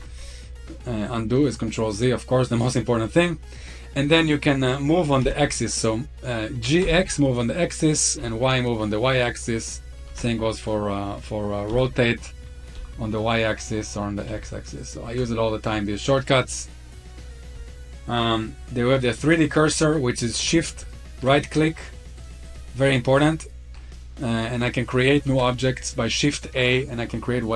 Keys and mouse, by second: 1.2-2.3 middle drag, 5.0 g, 6.7 x, 8.0 y, 9.9 ctrl+z, 11.5 r, 12.6 y, 14.1 x, 15.0 ctrl+z, 16.2-17.0 middle drag, 20.6 shift+right click, 21.2-21.7 middle drag, 22.0-22.3 shift+right drag, 22.6 shift+right click, 23.2 shift+right drag, 23.7-24.4 middle drag, 25.1 shift+a.